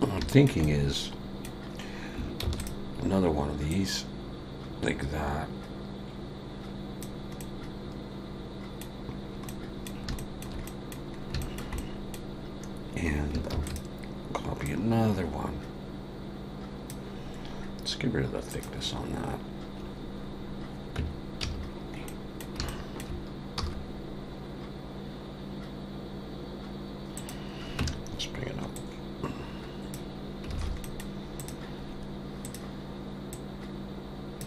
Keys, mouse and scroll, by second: 0.3 shift+middle click, 0.6 middle click, 2.4 shift+d, 7.4 middle click, 10.2 shift+middle click, 10.7 middle click, 11.2 scroll up 2, 11.4 shift+middle click, 11.8 middle click, 13.5 shift+d, 14.7 click, 18.5 click, 21.0 Tab, 21.4 a, 22.1 middle click, 22.7 shift+middle click, 23.6 e, 27.8 Tab, 28.7 click, 30.5 alt+a, 30.8 middle click, 31.4 click, 32.4 click.